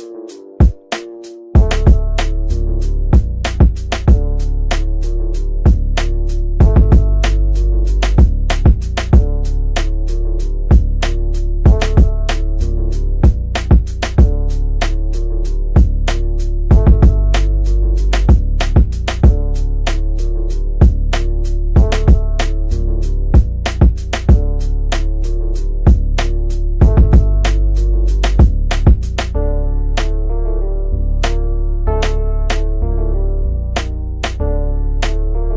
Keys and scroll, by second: 26.9 F3, 27.1 Escape.